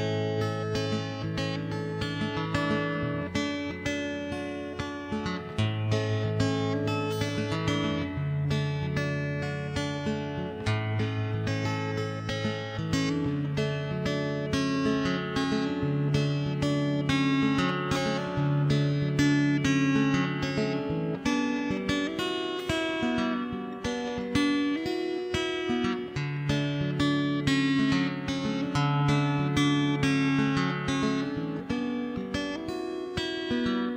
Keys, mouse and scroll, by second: 0.3-1.9 middle drag, 1.9 right click, 2.2-3.5 middle drag, 2.3 right click, 2.7 right click, 2.9 click, 3.1-4.6 right drag, 3.7 click, 3.7-4.9 middle drag, 5.1 middle click, 5.3 right click, 5.9 middle click, 6.1 right click, 6.9 middle click, 8.1 middle click, 8.4 shift+h, 8.6 middle click, 9.2 middle click, 9.7 click, 10.9 click, 12.4 alt+h, 12.6 middle click, 13.2-15.3 middle drag, 14.2 right click, 14.9 right click, 15.4 right click, 15.6 middle click, 16.1 right click, 16.3 middle click, 16.6 middle click, 17.6 right click, 17.7 middle click, 17.9 Tab, 18.2 middle click, 18.2 shift+h, 18.3 Tab, 19.0 middle click, 19.2 click, 19.7 click, 19.9 KP_0, 20.1 middle click, 20.7 right click, 20.8 middle click, 21.2 right click, 21.4 click, 21.6 middle click, 21.7 right click, 22.0 middle click, 22.3 middle click, 22.9 right click, 23.1 middle click, 23.5 middle click, 24.3 middle click, 24.6 click, 25.0 click, 25.6 KP_0, 25.8 middle click, 26.8 Tab, 27.0 middle click, 27.2 ctrl+s, 27.4 1, 27.5 right click, 27.8 x, 28.0 0, 28.6 alt+h, 28.8 right click, 29.7-32.4 typing, 30.6 right click, 31.7 click, 31.7 right click, 32.4 shift+click, 33.1 right click, 33.6 click.